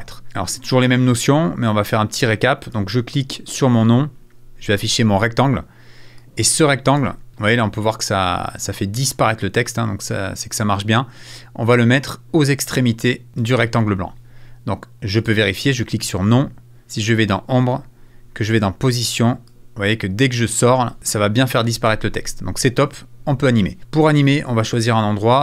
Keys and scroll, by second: 21.8 super+z.